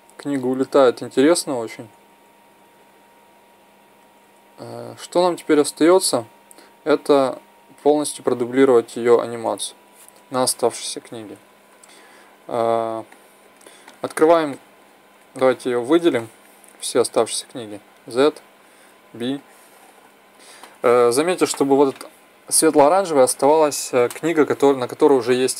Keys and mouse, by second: 0.1-0.7 Left, 0.9 Left, 1.1 Left, 1.6 Right, 1.8-2.7 Right, 2.9 Right, 3.1-3.6 Right, 3.7 Right, 3.9 Right, 4.1 Right, 4.4 Right, 4.8 Left, 5.2 Left, 5.4-9.0 Left, 9.2 Left, 9.3 Right, 13.0-14.9 middle drag, 16.1 middle drag, 17.7 z, 18.9 b.